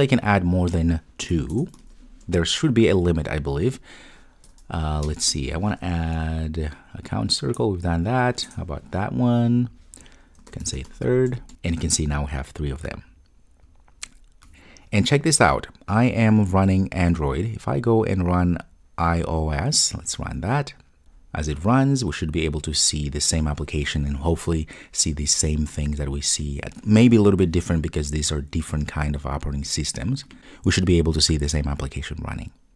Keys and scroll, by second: 1.7 super+v, 8.4 Return, 20.0 ctrl+r.